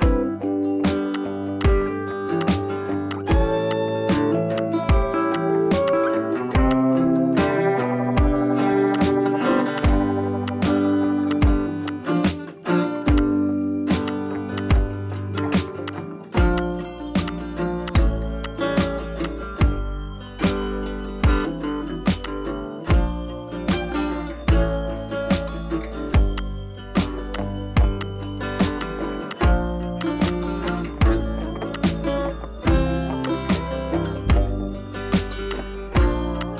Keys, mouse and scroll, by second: 0.5 [, 0.6 [, 1.1-1.5 click, 2.1 [, 2.2 [, 2.4-4.3 drag, 6.9 space, 7.3-7.6 scroll up 1, 7.6 [, 7.7 [, 8.9-9.5 drag, 12.6 ], 12.7 ], 13.1-13.7 drag, 16.3 scroll down 1, 16.5 space, 16.6-16.9 drag, 20.7 scroll up 1, 21.1 [, 21.2 [, 22.2-23.5 drag, 24.0 [, 24.6 ctrl+z, 25.6 ], 25.8 ], 26.3-26.9 drag, 28.7 space, 28.7 click, 29.1 space, 29.3-29.7 click, 30.2 space, 30.3-31.3 click, 30.5 space, 31.1 space, 31.7-32.1 click, 32.5-33.1 typing, 33.2-34.9 drag, 35.1 scroll down 1, 35.3 space, 35.4 click, 35.6 space, 35.9 scroll up 1, 36.3-36.5 click.